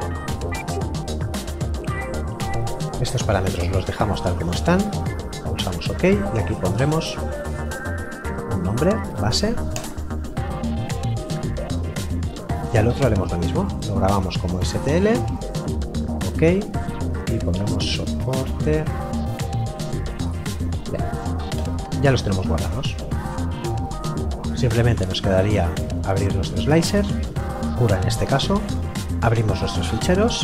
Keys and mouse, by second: 2.7 click, 7.4-8.3 typing, 11.5 right click, 13.6 click, 17.5-19.5 typing, 21.6 Return, 27.4 click, 29.0 click.